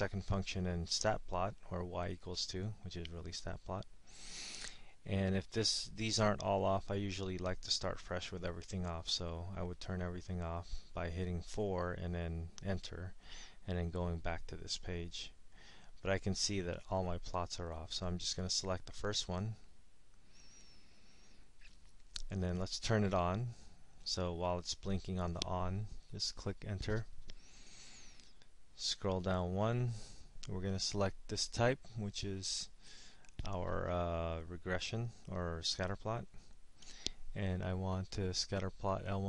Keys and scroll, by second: 20.5 Return, 25.9 Return, 29.0 Down, 36.5 Down.